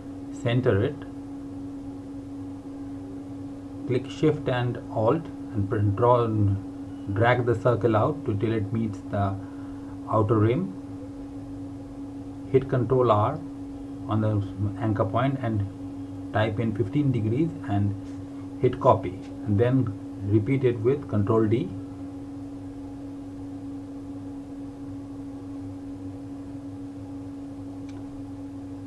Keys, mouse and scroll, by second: 10.8 r, 13.5 alt+Num_Lock, 13.5 alt+click, 17.1-21.2 typing, 26.5 click.